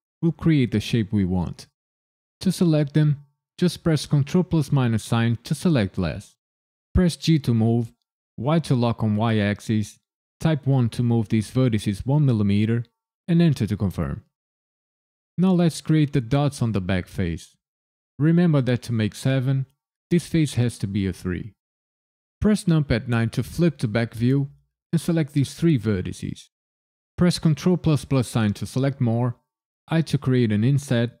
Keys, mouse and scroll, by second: 4.1 ctrl+KP_Subtract, 7.1 g, 8.4 y, 10.6 KP_1, 13.2 KP_Enter, 22.6 KP_9, 24.4 click, 25.1 shift+click, 25.6 shift+click, 27.4 ctrl+KP_Add, 29.9 i.